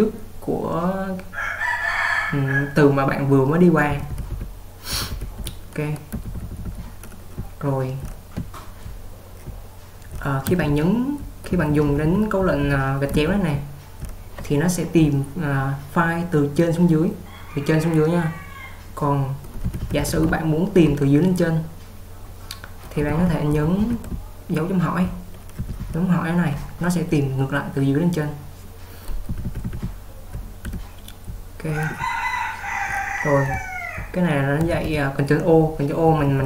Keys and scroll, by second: 4.1-5.2 typing, 19.9-20.2 typing, 23.0-25.9 typing, 28.3-34.7 typing, 36.1-36.4 typing.